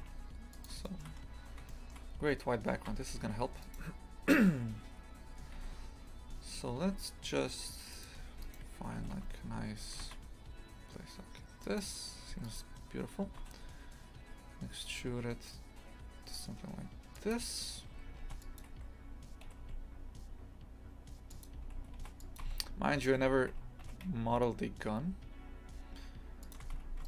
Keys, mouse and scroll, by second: 0.9 shift+middle drag, 1.2-1.5 scroll up 4, 1.7 middle click, 2.1 scroll down 1, 3.0 Tab, 3.7 right click, 5.6 a, 5.8 a, 6.3 s, 8.2 2, 8.5 right click, 9.0 g, 12.3 2, 12.5 right click, 13.4 e, 18.3 ctrl+r, 19.5 g, 22.0 ctrl+r, 23.1 g.